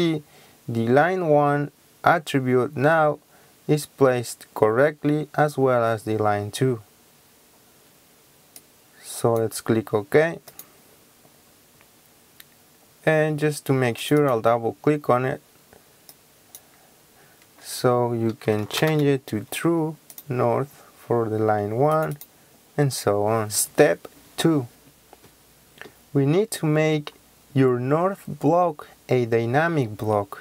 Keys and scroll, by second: 18.6-18.9 typing, 23.7 Escape.